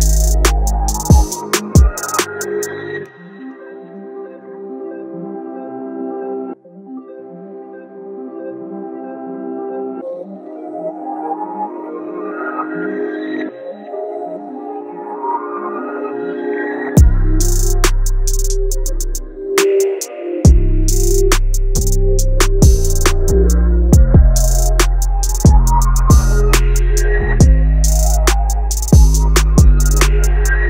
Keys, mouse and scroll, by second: 0.0-0.5 typing, 0.9 Return, 2.4 click, 2.5 click, 3.3 typing, 7.7 click, 7.9-23.3 drag, 24.6-29.4 drag.